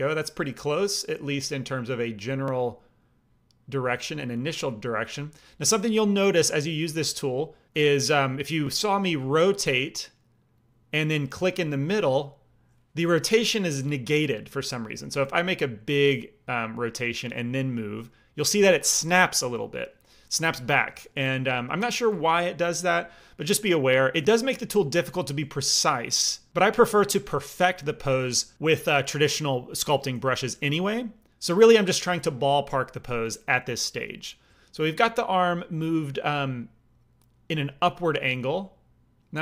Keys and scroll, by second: 21.3 ctrl+z, 22.0 ctrl+z.